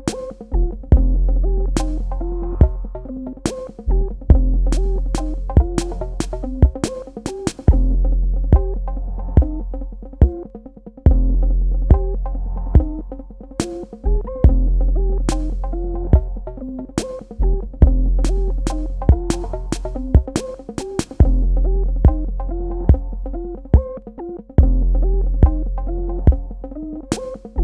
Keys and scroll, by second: 20.5 space.